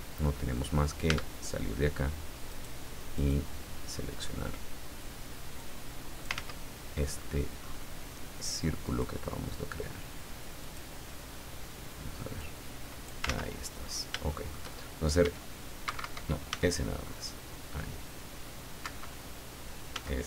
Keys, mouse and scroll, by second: 1.1 Tab, 2.5 right click, 3.2 right click, 3.9-4.5 scroll down 4, 5.6 click, 6.4 ctrl+z, 6.9-7.4 ctrl+scroll up 3, 7.6-8.0 scroll up 2, 8.8 right click, 9.7-10.0 scroll down 2, 10.6 right click, 11.2-11.5 scroll down 2, 12.4 click, 13.3 ctrl+z, 13.7-14.3 ctrl+scroll up 1, 14.3 shift+middle click, 15.2 e, 16.5 s, 18.8 Escape, 19.9 s.